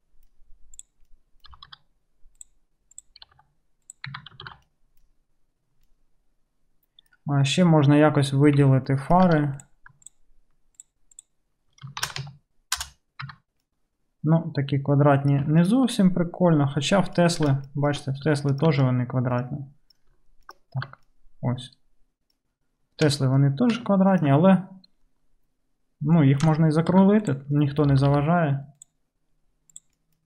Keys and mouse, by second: 0.8 middle click, 1.6 g, 2.9 middle click, 3.3 g, 4.2 Tab, 4.6 alt+z, 4.6-6.3 middle drag, 6.3 click, 6.4 middle click, 6.5 click, 6.6 click, 8.7 Tab, 9.4 2, 9.6 middle click, 10.1 shift+middle click, 10.1-15.1 shift+drag, 10.8 shift+right click, 11.2 shift+right click, 12.1 shift+e, 13.3 Tab, 15.1-16.8 right drag, 16.8-19.1 middle drag, 19.1-20.6 right drag, 20.6 alt+middle click, 21.1-23.1 right drag, 23.1-24.3 shift+drag, 24.3 alt+middle drag, 24.4-30.2 right drag, 26.6 Tab, 27.0 1, 27.2 click, 27.2 middle click, 28.0 g, 29.8 click, 29.8 middle click.